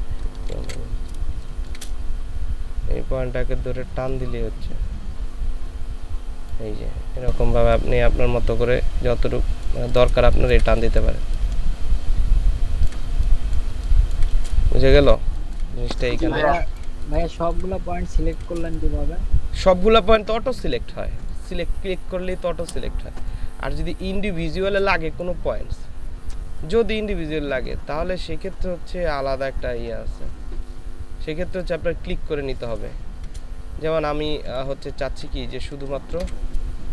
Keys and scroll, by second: 0.5 ctrl+shift+z, 1.3 space, 10.2 ctrl+space, 11.2 ctrl+space, 15.1 ctrl+space, 15.9 ctrl+space, 24.1 space, 33.1 ctrl+space, 34.3 ctrl+z, 34.6 ctrl+z, 34.7 ctrl+z, 34.9 ctrl+z, 35.1 ctrl+z, 36.1 ctrl+shift+z, 36.8 ctrl+shift+space.